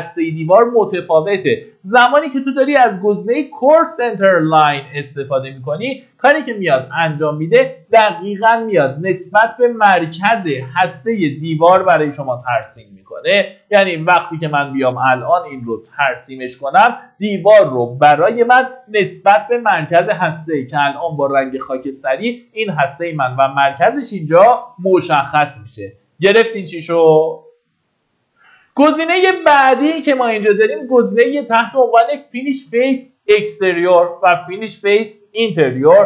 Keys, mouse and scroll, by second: 18.4 Escape, 19.8-20.6 scroll up 1, 23.8-24.1 scroll down 1, 24.8 middle click, 25.6-26.6 scroll up 1, 29.7 click.